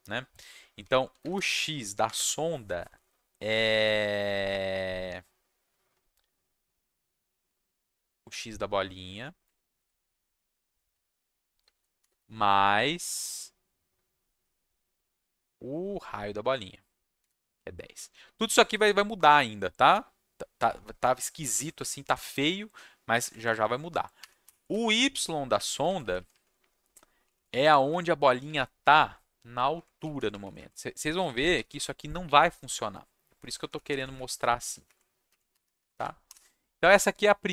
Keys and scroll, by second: 0.8 ., 1.1 x, 1.2 space, 2.0 =, 9.7 ctrl+c, 11.0 ctrl+v, 11.6 space, 12.0 shift+=, 12.1 space, 16.9-17.7 typing, 20.5 ,, 21.5 ctrl+shift+Down, 21.7 Left, 23.2 Left, 23.3 Left, 23.5 Left, 24.4 y, 24.7 Right, 25.5 Left, 25.7 Left, 25.8 Left, 26.0 Left, 26.1 Left, 26.3 Left, 27.4 shift+Left, 27.6 shift+Left, 27.9 shift+Right, 28.4 Left, 28.8 Right, 28.8 =, 29.7 Right, 30.3 shift+Right, 30.4 shift+Right, 30.5 shift+Right, 30.8-32.2 typing, 33.4 Right, 33.6 Right, 33.7 Right, 33.8 =, 33.9 Right, 34.0 Right, 34.1 Right, 34.3 Right, 34.6 Left, 34.8 Right, 35.2 Left.